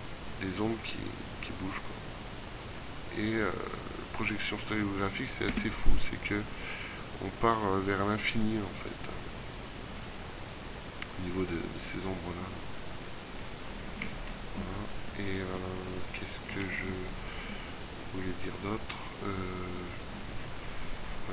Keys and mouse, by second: 1.3-2.3 middle drag, 2.5 middle click, 3.7 middle click, 4.5 middle click, 6.9 middle click, 13.9-16.6 middle drag, 17.0-18.5 middle drag.